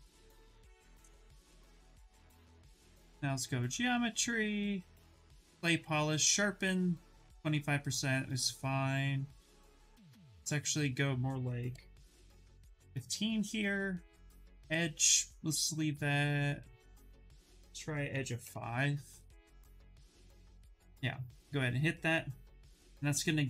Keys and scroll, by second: 11.4 1, 11.7 5, 12.3 Return, 17.8 5, 18.1 Return.